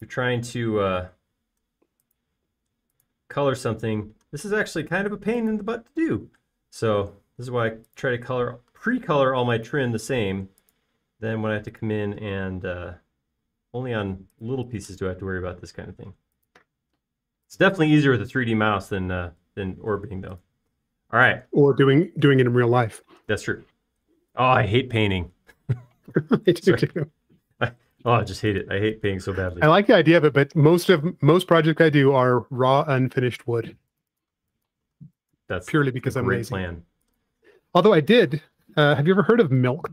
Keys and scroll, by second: 21.5 space, 34.2 space, 39.2 BackSpace.